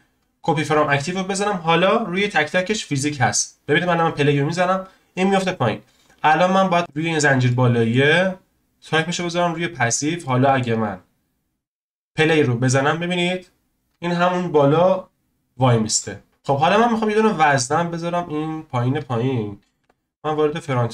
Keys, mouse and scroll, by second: 2.1 click, 3.7-6.9 drag, 7.2 scroll up 1, 7.5-8.9 shift+middle drag, 8.9-10.0 drag, 10.0 scroll down 1, 10.2-10.8 shift+middle drag, 10.8-11.1 scroll up 1, 11.3-12.0 scroll up 1, 12.0-12.5 drag, 12.5-12.9 scroll up 1, 12.9-13.7 scroll down 1, 13.7-14.8 scroll down 1, 16.3 click, 18.2-19.8 drag, 19.8 KP_1, 20.2-20.7 scroll up 1, 20.7-20.9 shift+middle drag.